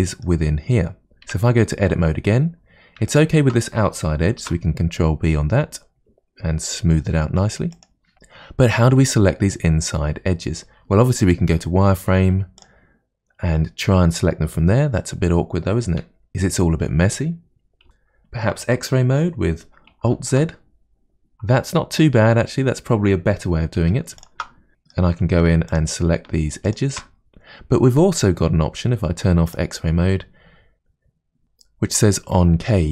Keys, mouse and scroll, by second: 1.3 Tab, 1.9-3.1 scroll up 2, 3.1 alt+click, 4.5 ctrl+b, 7.6-10.6 middle drag, 11.6 z, 15.9 z, 20.2 alt+z, 23.8 2, 24.2 alt+click, 24.7-25.7 middle drag, 25.7 alt+shift+click, 26.7 alt+shift+click, 29.5 click.